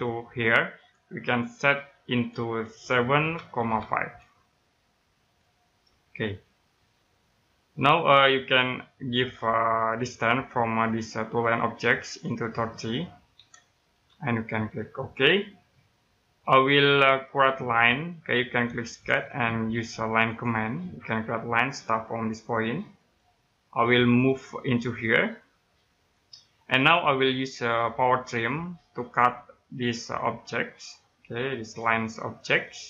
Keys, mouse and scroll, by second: 3.2-3.8 typing, 5.2 click, 6.0 scroll down 1, 6.6 middle click, 7.5-9.1 scroll up 1, 9.1 click, 13.3 3, 15.1 click, 16.5-18.8 scroll up 1, 19.8 click, 22.9 click, 23.5-23.8 scroll down 1, 23.8 middle click, 24.2-25.1 scroll down 1, 25.9 click, 27.4-28.9 scroll up 1, 28.9 click, 32.1 middle click.